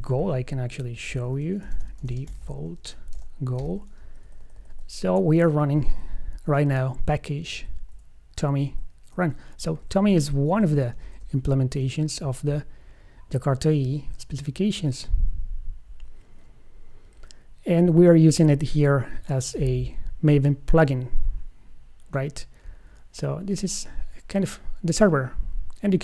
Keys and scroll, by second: 1.4 super+f, 3.8 Escape, 6.0 alt+shift+Right, 10.2 alt+Left, 11.2 alt+shift+Left.